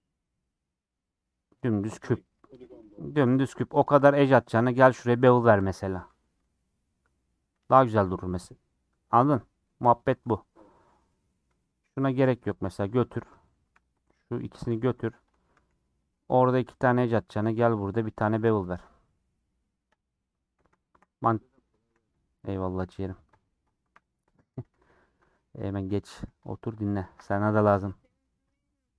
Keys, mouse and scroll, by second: 3.1 2, 3.8 Left, 4.1 shift+click, 4.5 ctrl+b, 6.1 Tab, 6.2-10.1 middle drag, 10.1 Tab, 10.2-11.5 middle drag, 11.5 2, 11.9 click, 12.3 g, 13.6 1, 13.8 click, 14.7 g, 15.4 a, 15.7 m, 16.4 2, 16.6 click, 16.8 middle click, 17.6 ctrl+click, 18.3 ctrl+b, 20.2-21.8 middle drag, 21.8 2, 22.2 click, 22.8 g, 23.8 1, 23.9 click, 24.6 g, 25.4 middle click, 25.9 click, 26.7 shift+click, 27.2 g, 28.7 middle click.